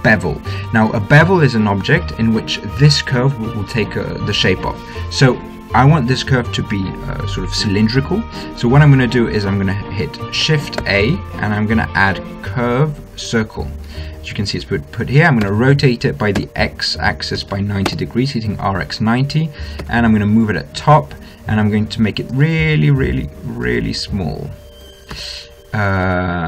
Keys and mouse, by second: 11.0 shift+a, 15.7 r, 20.1 g, 22.6 s, 24.0 s, 25.4 s.